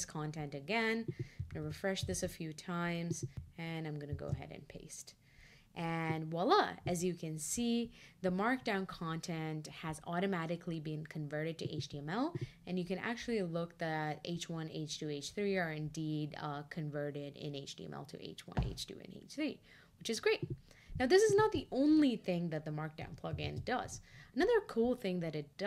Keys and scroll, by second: 4.1 shift+super+v.